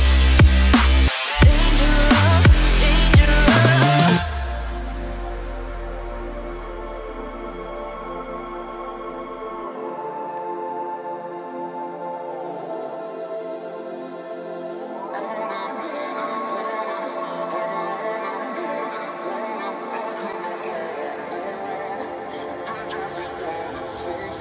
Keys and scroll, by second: 13.5 ctrl+g, 16.4 ctrl++, 24.1 ctrl+[.